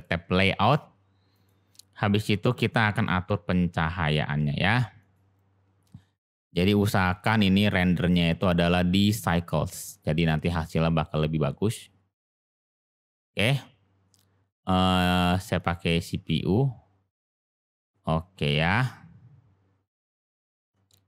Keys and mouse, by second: 1.3 click, 2.7 middle click, 7.7 click, 9.2 drag, 9.6-10.6 drag, 15.0-15.9 drag, 17.3 click, 17.9 click.